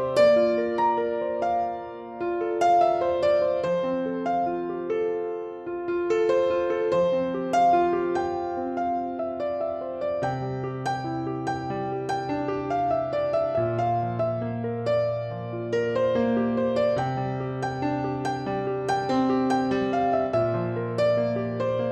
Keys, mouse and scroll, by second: 0.0 alt+z, 0.3-0.8 scroll up 1, 0.8 shift+middle click, 1.1-1.6 scroll up 1, 1.6-3.8 middle drag, 2.1 KP_5, 2.4-3.8 scroll down 1, 3.8 i, 8.3 click, 9.1 shift+middle click, 9.9 middle click, 9.9 scroll down 1, 10.2 click, 10.8 e, 11.0 click, 11.5 s, 14.3 click, 14.7 scroll down 1, 15.0-18.8 middle drag, 16.3-16.8 scroll up 1, 16.8-17.7 scroll down 1, 17.7 Tab, 18.8 click, 19.5-21.9 drag.